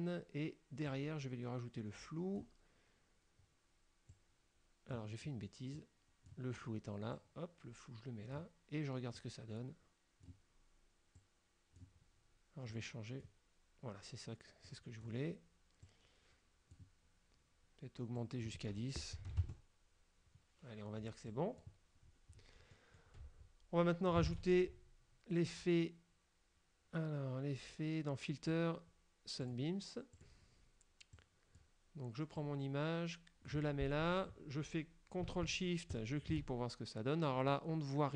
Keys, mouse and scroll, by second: 1.0-2.7 drag, 4.2-5.2 drag, 5.8 click, 7.2-8.6 drag, 9.3-10.6 drag, 11.3 click, 12.8 click, 13.5 middle click, 14.7 click, 15.9-17.0 drag, 18.2 click, 19.3 KP_1, 19.3 KP_0, 19.5 KP_Enter, 21.4 click, 22.1-22.7 scroll down 4, 22.8 click, 24.4 shift+a, 29.5 click, 30.3 click, 31.3 click, 32.5-33.8 drag, 36.0 ctrl+shift+click.